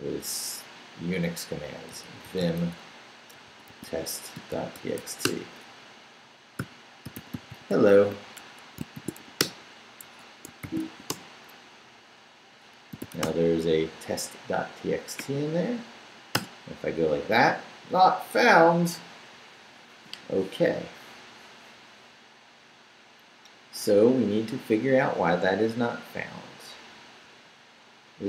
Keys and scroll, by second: 1.6-11.3 typing, 8.4 Escape, 10.0 Escape, 12.7-13.5 typing, 16.3 Return.